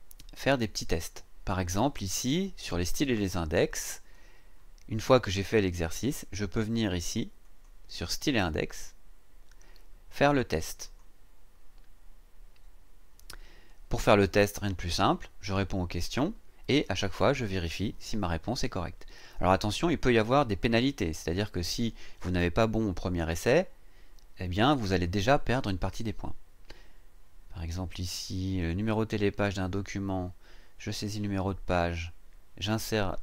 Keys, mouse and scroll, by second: 2.7 click, 4.1-6.3 scroll down 1, 7.4 click, 10.8 click.